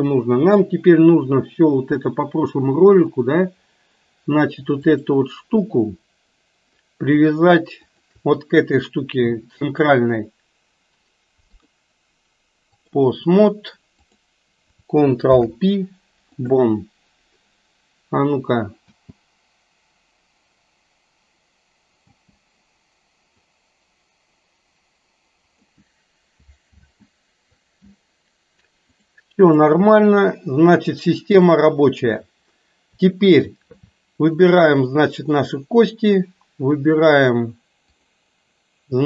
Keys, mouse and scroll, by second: 3.2 click, 5.0 click, 7.9 shift+click, 11.5-13.0 drag, 14.0 click, 15.3 ctrl+p, 18.9 space, 22.1 space, 23.4-25.9 drag, 26.8 ctrl+z, 29.0 click, 31.3 click, 34.4 shift+click, 37.0-38.3 drag.